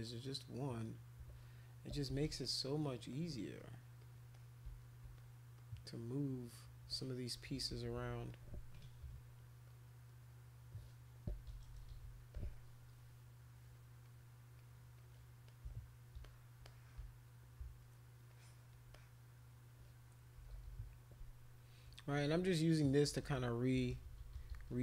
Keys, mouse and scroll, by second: 0.1 click, 1.9 ], 2.1 ], 2.2 ], 2.4 click, 3.1 click, 3.6 click, 4.0 click, 4.3 click, 5.1 click, 5.6 click, 5.9 click, 7.4-8.1 typing, 8.3 click, 8.7 click, 9.6 click, 10.2 click, 11.5-12.0 typing, 12.3 click, 14.0 click, 14.6 click, 14.9 click, 15.5 shift+click, 16.2 alt+click, 16.6 click, 18.3 alt+click, 18.9 click, 20.4 [, 20.5 [, 20.7 [, 20.8 [, 22.1-24.7 typing, 22.7 click, 23.7 click.